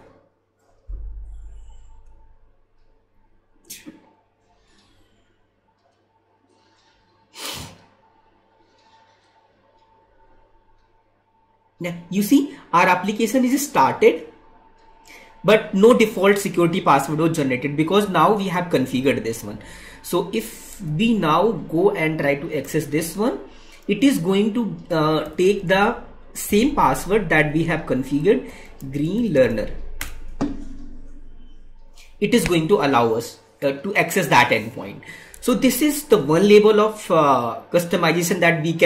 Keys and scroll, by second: 20.7 alt+Tab, 27.5 Tab, 35.3 Tab.